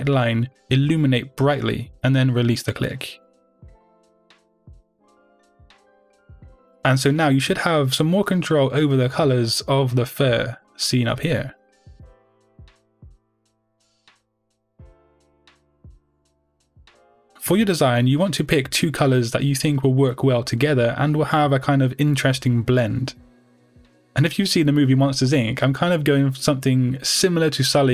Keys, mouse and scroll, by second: 6.9 click, 8.9 scroll up 2, 9.7-12.2 middle drag, 12.2-25.2 drag, 27.7-27.9 middle drag.